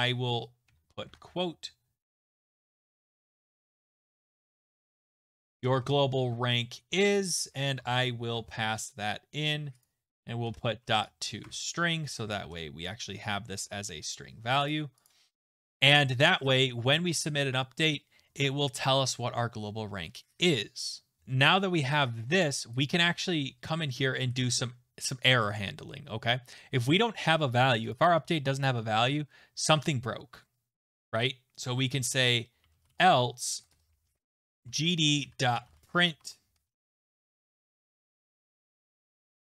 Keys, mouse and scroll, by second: 0.7-1.1 typing, 0.9 Left, 2.1-8.8 typing, 9.8 click, 10.2-14.0 typing, 14.7 click, 15.1 click, 21.2-22.0 scroll, 22.4 click, 22.8 click, 27.9 click, 28.0 click, 28.6 click, 29.2 scroll, 29.3-29.7 scroll down 3, 32.3-37.2 typing, 37.5 ctrl+z, 37.8 click, 38.4 Up, 38.4-39.4 typing.